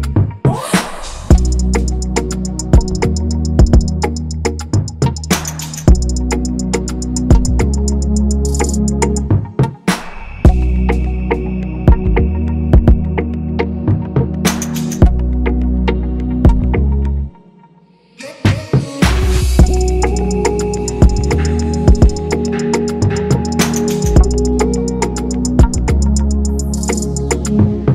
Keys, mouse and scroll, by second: 0.3 click, 1.2 click, 2.4-3.5 drag, 4.5-5.5 drag, 6.5 click, 8.8 click, 10.7 click, 11.5 click, 19.4 click, 19.7-20.0 scroll up 2, 20.8-21.5 drag, 22.5 click, 22.7 scroll down 2, 25.5 click, 26.1 scroll up 1, 27.5-27.9 scroll up 1.